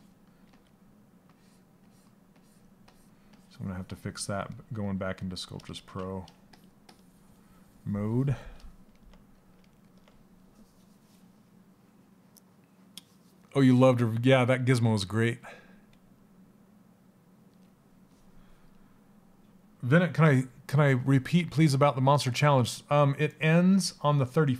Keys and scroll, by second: 5.2 ctrl+z.